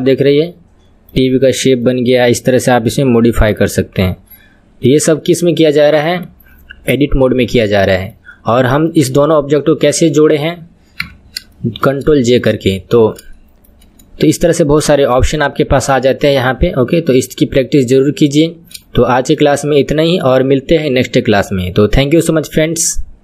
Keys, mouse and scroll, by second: 2.2 KP_3, 2.8 KP_1, 3.5 Left, 5.2-6.2 middle drag, 6.2-6.6 scroll down 2, 6.6-10.1 middle drag, 10.1 scroll up 2, 11.0 KP_3, 11.6-23.2 shift+middle drag.